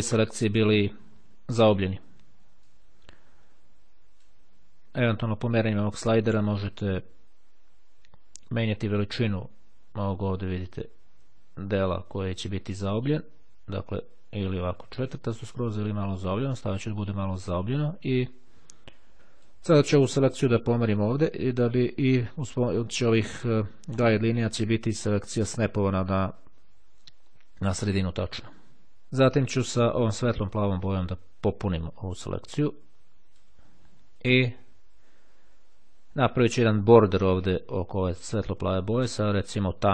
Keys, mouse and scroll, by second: 2.7-10.0 drag, 10.8-11.5 ctrl+scroll up 2, 12.9-17.6 drag, 19.1 click, 20.4-22.8 drag, 26.8-27.3 scroll down 1, 28.3-28.8 ctrl+scroll down 2, 30.1-34.0 drag, 39.7 click.